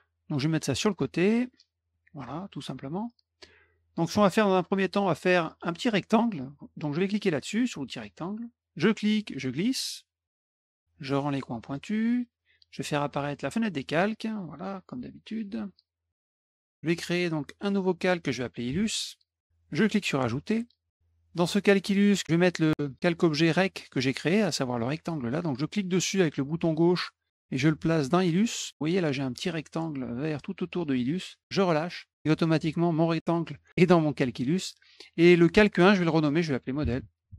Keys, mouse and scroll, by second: 0.5-1.7 drag, 1.9 middle click, 2.7-3.4 middle drag, 8.1 click, 9.1-10.3 drag, 11.6 click, 13.3 click, 13.8 click, 15.1 click, 15.7 middle click, 17.6 click, 18.4-19.4 typing, 20.5 click, 25.6-31.4 drag, 35.5 click, 35.7 click, 36.3-37.3 typing.